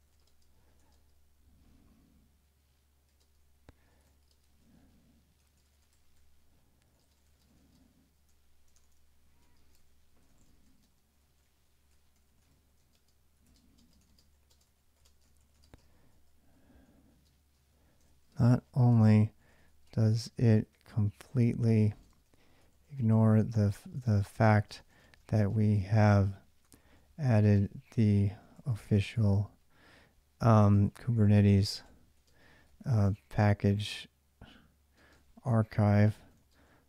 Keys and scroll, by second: 0.0-1.1 typing, 2.9-29.2 typing, 30.6-33.6 typing, 34.7-36.8 typing.